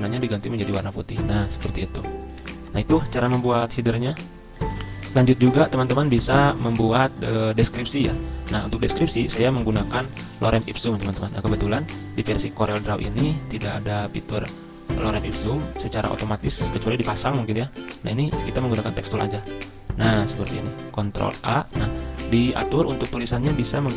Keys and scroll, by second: 10.1 super+m, 16.0 ctrl+c, 16.3 alt+Tab, 21.3 ctrl+v.